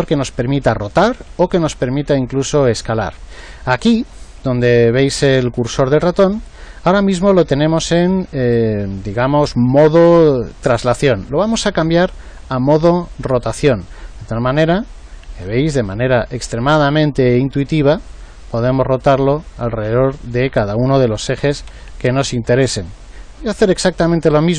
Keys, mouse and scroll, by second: 11.8 click, 14.4-18.0 drag, 18.8 click, 21.3 ctrl+z, 21.6 ctrl+z, 22.9 ctrl+z.